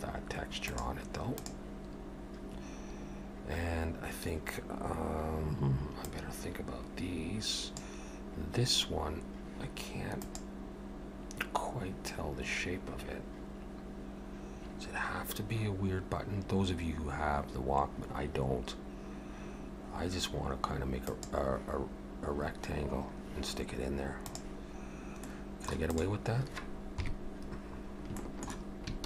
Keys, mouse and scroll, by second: 25.3 middle click, 25.9 click, 27.0 KP_3, 27.9 scroll up 2, 28.2 shift+middle click.